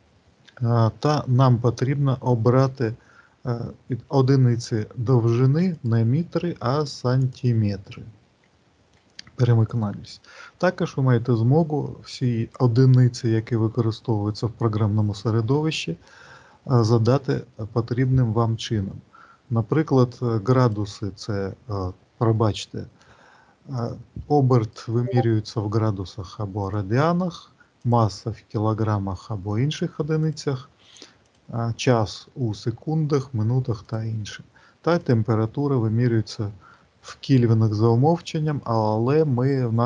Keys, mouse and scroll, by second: 5.5 click, 20.5 click, 24.5 click, 26.5 click, 27.7 click, 30.2 click, 31.0 click, 32.9 click, 34.8 click.